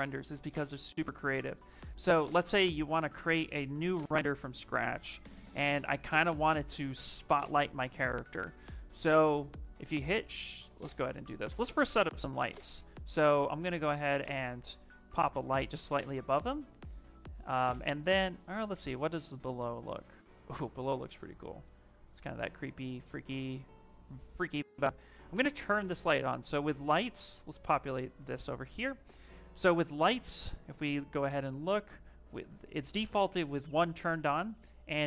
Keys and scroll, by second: 1.3 ,, 30.4-31.1 typing.